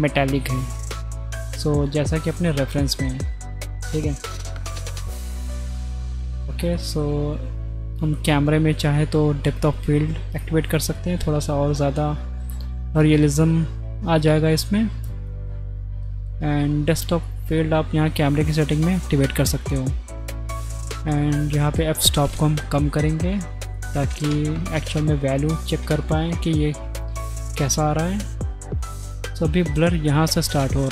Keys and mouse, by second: 2.7 middle click, 5.9 shift+click, 6.7 shift+click, 9.5 click, 10.9 click, 14.2 click, 21.0-22.3 drag, 23.6 click.